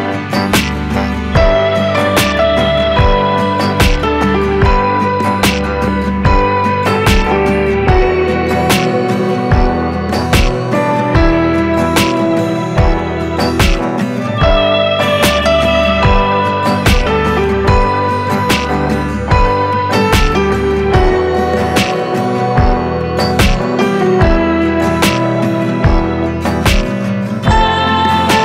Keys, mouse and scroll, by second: 0.8 s, 2.8 click, 2.9 scroll down 2, 3.1 g, 4.3 click, 4.5-4.9 scroll up 1, 4.9 shift+right click, 5.1 shift+a, 7.2 scroll up 1, 7.4 s, 8.6 Tab, 8.9 1, 9.0 f, 10.7 click, 11.8 e, 12.9-13.8 scroll up 1, 13.8 Tab, 14.6-17.7 drag, 17.7 ctrl+2, 17.8-18.3 right drag, 18.3 drag, 18.5 scroll down 1, 18.7 click, 19.5 s, 22.3-22.6 scroll up 1, 23.1 Tab, 23.5 3, 23.6 click, 24.0 shift+d, 24.3 p, 24.7 Tab, 24.8 click, 25.2 s, 25.8-26.6 right drag, 26.6 s, 27.5 Tab, 28.0 click.